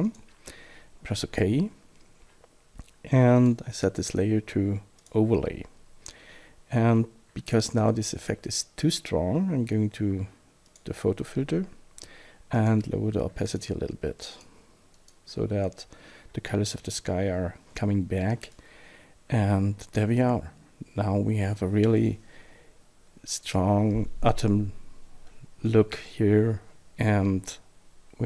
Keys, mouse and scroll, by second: 0.0 click, 3.4 click, 5.0 click, 10.7 click, 12.5 click, 13.4 click, 14.2 click, 15.0 click.